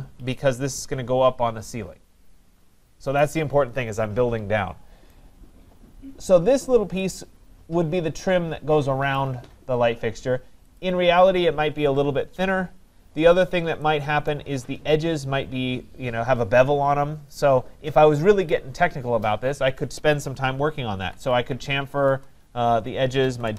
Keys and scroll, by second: 22.0 Return.